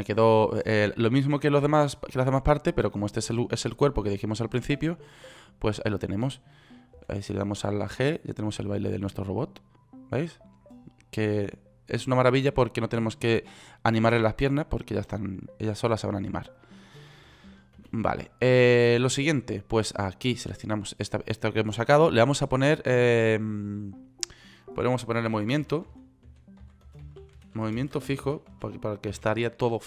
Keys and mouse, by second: 7.5 g, 18.4 ctrl+z, 21.2 click.